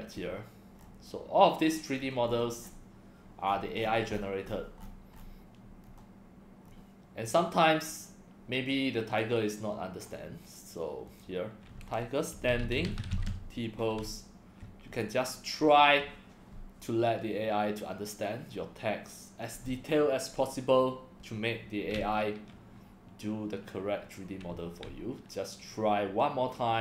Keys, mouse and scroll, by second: 0.1 scroll down 4, 0.8 scroll down 3, 1.9-2.7 scroll down 10, 3.4-5.2 scroll up 27, 5.8 scroll up 3, 6.6 scroll down 1, 9.2-10.0 drag, 11.1 click, 12.1-13.6 typing, 15.0 click.